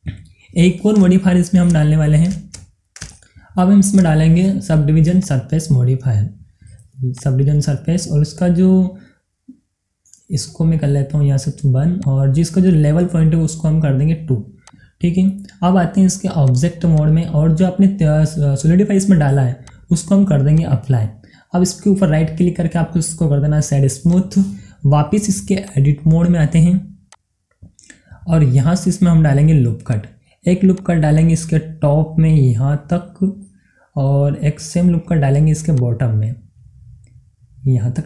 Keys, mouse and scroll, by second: 0.0 scroll down 1, 0.3-1.7 middle drag, 1.7-3.1 shift+middle drag, 3.1 shift+scroll up 2, 3.6-5.2 shift+middle drag, 5.2 click, 10.0-10.9 scroll down 1, 10.9-12.0 scroll up 1, 12.0 click, 14.6 click, 19.6 click, 22.2 right click, 24.1 click, 29.9-33.9 drag, 33.9-35.7 middle drag, 35.7-38.0 drag.